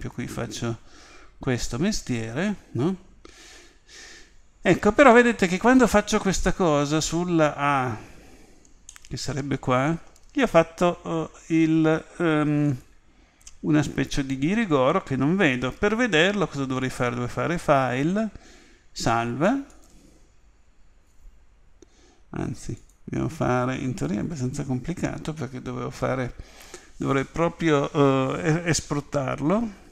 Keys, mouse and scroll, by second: 8.9-11.6 middle drag.